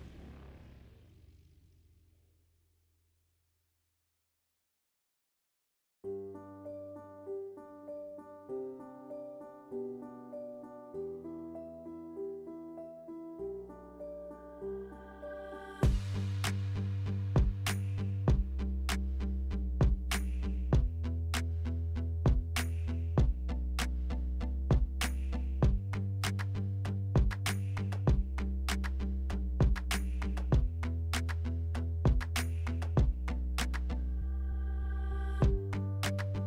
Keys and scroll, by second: 2.7 alt+e, 4.4 2, 17.2 s, 21.9 s, 23.6 s, 26.4 4, 26.7 s, 28.0 s, 30.0 s, 32.5 s.